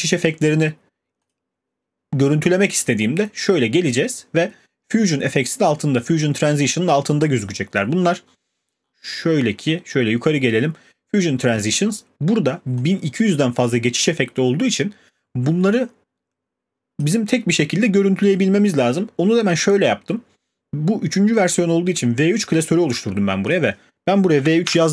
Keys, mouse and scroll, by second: 1.3 click, 6.0 click, 6.2 scroll, 7.6-7.9 scroll, 9.9 scroll, 17.0-22.0 drag, 23.5 click, 23.9 click, 24.1-24.9 typing.